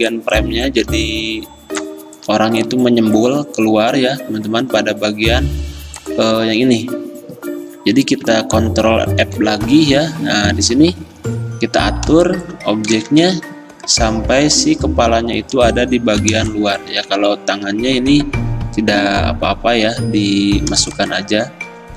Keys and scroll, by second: 9.3 ctrl+f, 13.2 x.